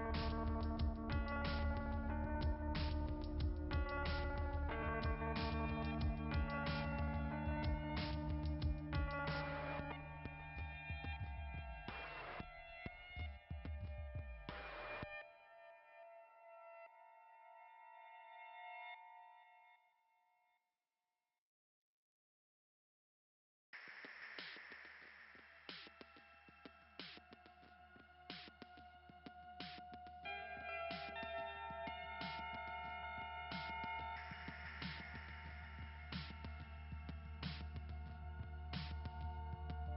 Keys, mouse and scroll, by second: 0.5 click, 2.2 right click, 3.1 click, 3.2 click, 4.1 click, 5.5 click, 11.9 click, 13.1 click, 14.1 click, 17.5 click, 19.2 scroll down 2, 21.3-22.2 scroll up 4, 25.6 click, 30.5 click, 30.9 click, 31.2 click, 32.6 click, 35.4-35.7 scroll up 2, 38.1 right click, 38.3 right click, 39.2 click.